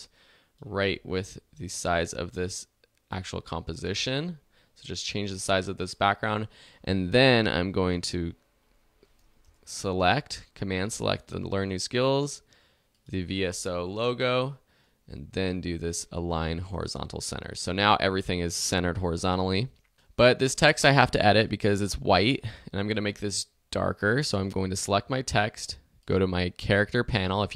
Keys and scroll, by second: 9.3 super+Return, 9.8 super+Return.